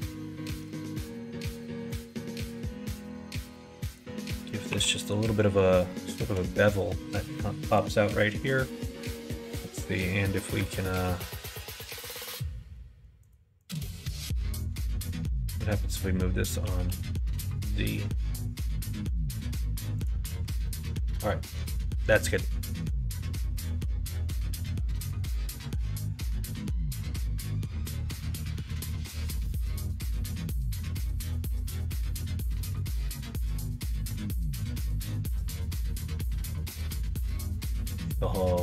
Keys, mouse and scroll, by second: 0.7 ctrl+r, 4.2 middle click, 4.7 3, 5.0 click, 6.0 click, 7.6 click, 8.4 shift+click, 8.8 middle click, 9.6 middle click, 13.2 shift+click, 13.6 shift+click, 16.6 g, 20.4 Tab, 20.6 click, 21.0 middle click, 21.8 middle click, 22.7 middle click, 26.2 middle click, 26.5 middle click, 27.4-29.3 middle drag, 29.6 middle click, 33.1 middle click, 33.7 middle click, 34.1 Tab, 34.6 click, 35.2 middle click, 35.7 3, 37.0 click, 37.4 l, 37.8 right click.